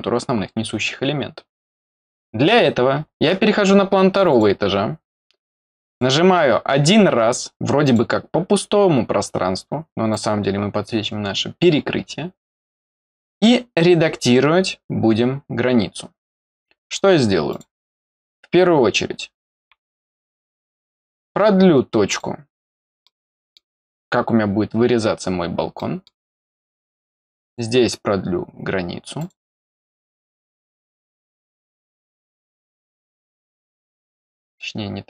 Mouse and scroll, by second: 4.1 click, 4.2 click, 5.8 click, 7.8 click, 10.0 click, 17.4 click, 19.8 middle click, 22.0 click, 23.0 middle click, 25.7 middle click, 27.4 click, 29.1 click, 31.6 click, 32.6 click.